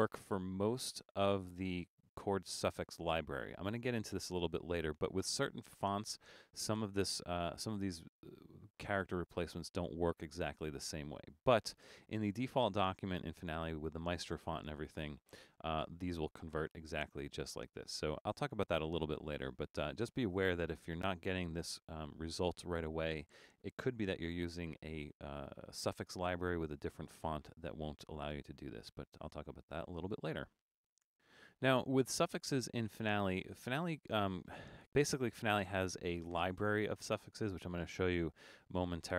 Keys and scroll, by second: 28.7 BackSpace.